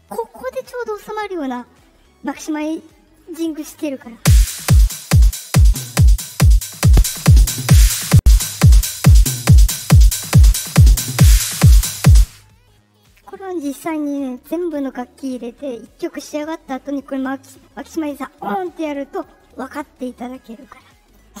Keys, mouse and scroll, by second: 2.6 click, 4.1 space, 6.8 click, 8.5 click, 12.0 space, 12.8 click, 19.1 click.